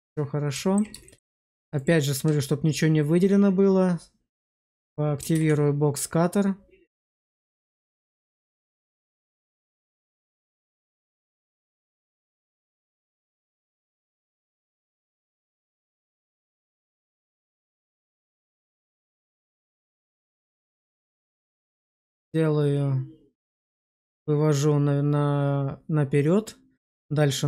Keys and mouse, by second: 0.9 shift+middle click, 5.2 alt+w, 7.9-10.2 drag, 16.8 middle click.